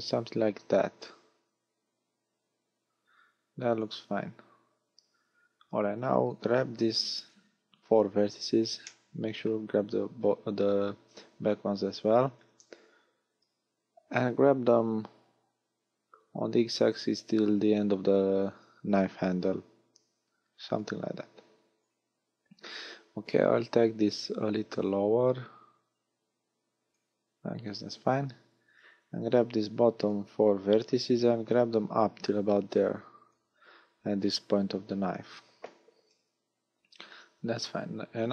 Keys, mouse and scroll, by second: 3.8 click, 5.5 a, 7.1 b, 8.8 middle click, 12.3 KP_1, 13.5-13.9 scroll up 1, 14.6 click, 22.7 a, 22.9 a, 24.1 click, 27.9 a, 29.2 b, 31.5 click, 37.9 a.